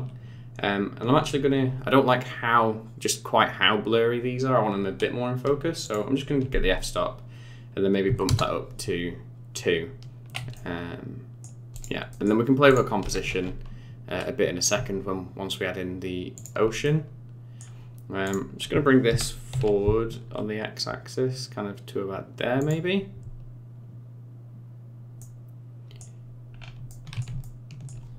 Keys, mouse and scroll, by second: 5.8 click, 10.5 middle click, 11.7 click, 12.1 middle click, 12.7 click, 13.0 g, 16.8 middle click, 18.2 click, 19.1 g, 25.2 middle click, 26.5-26.9 scroll up 4, 26.9 middle click, 27.4 shift+middle click.